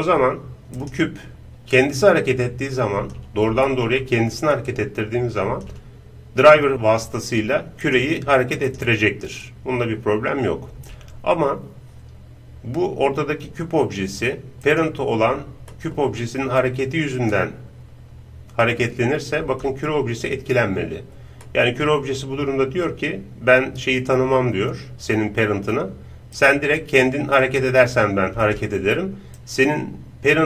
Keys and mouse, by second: 0.8-3.0 right drag, 1.7-3.6 drag, 3.7-5.5 middle drag, 4.7-7.8 drag, 7.8-10.7 right drag, 9.4-11.4 drag, 14.6-16.3 right drag, 15.7 middle click, 16.2 click, 16.3-17.4 middle drag, 16.6-19.4 drag, 16.6 right click, 21.5-23.1 middle drag, 26.4-28.4 right drag, 27.5-29.1 drag.